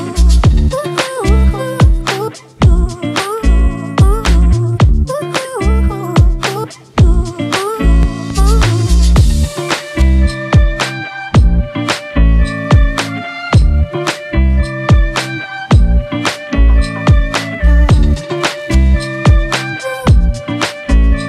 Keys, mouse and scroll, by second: 0.1 double click, 2.9 double click, 15.7 double click, 17.3-18.6 typing.